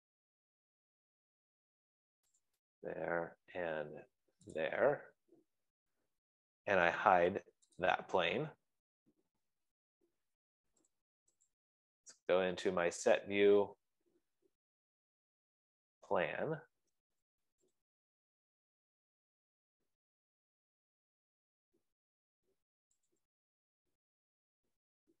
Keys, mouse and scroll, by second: 0.4 click, 2.3 click, 3.0 click, 3.9-4.2 scroll, 5.0 click, 8.4 click, 11.2 middle click, 12.0 middle click, 12.0 click, 12.2 click, 16.8 click, 18.5-23.3 drag, 23.5-25.2 drag.